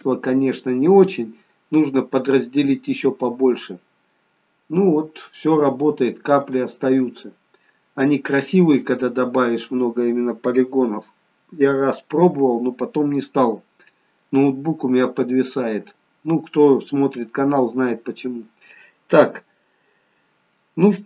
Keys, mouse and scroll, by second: 4.2-5.8 scroll down 1, 7.0 click, 7.3-9.7 scroll down 2, 13.5-14.0 scroll up 1, 14.2 middle click, 15.5-17.1 scroll down 1, 17.1 middle click, 20.0-20.4 scroll down 2, 20.7 middle click.